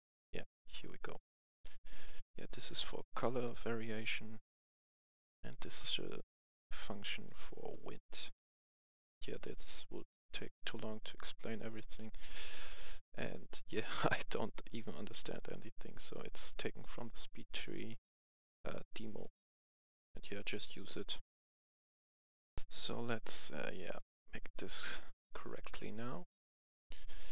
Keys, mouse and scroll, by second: 1.4 right click, 1.7-2.1 scroll down 1, 2.1 right click, 2.8-3.1 scroll up 1, 3.1 right click, 3.6-4.3 scroll down 1, 4.3 click, 5.8 click, 6.3 right click, 6.8-7.1 scroll down 1, 7.1 right click, 7.4-7.8 scroll down 1, 7.8 right click, 9.7-10.2 scroll up 1, 10.2 right click, 10.6-11.7 scroll up 1, 11.9-13.7 right drag, 14.2-16.6 right drag, 20.9 click, 22.6 F10, 23.9-27.2 drag.